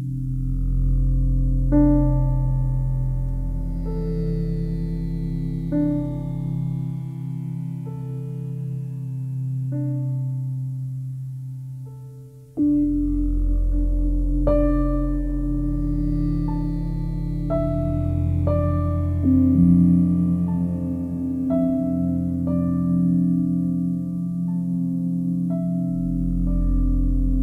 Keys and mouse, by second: 0.4 click, 1.2 d, 3.1-3.6 typing, 4.4 click, 4.8 alt+click, 5.7 alt+click, 6.1 ctrl+alt+click, 6.5 ctrl+alt+shift+click, 6.6-7.3 typing, 6.8-7.9 ctrl+alt+shift+drag, 8.2-10.5 drag, 11.0 click, 12.2-14.2 drag, 14.5 click, 15.8 click, 16.6-20.1 alt+drag, 20.4 ctrl+alt+click, 20.9 ctrl+alt+click, 21.6 ctrl+alt+click, 22.1 ctrl+alt+shift+click, 22.6 ctrl+alt+click, 23.4 click, 24.0 shift+click, 24.6 shift+click, 25.7 click, 26.8-27.4 drag.